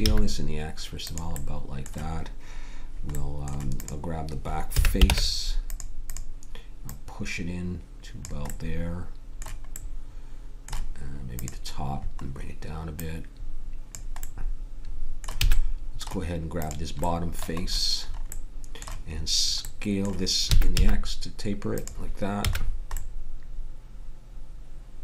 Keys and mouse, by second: 4.8 a, 5.0 ctrl+Tab, 12.2-14.9 drag, 15.4 a, 20.4 s, 22.4 a.